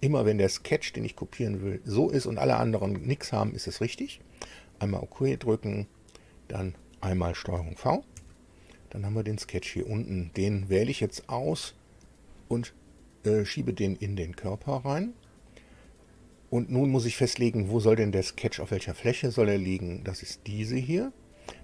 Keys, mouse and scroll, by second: 4.8 click, 8.1 ctrl+v, 10.5 click, 11.0-14.1 drag, 20.5 click.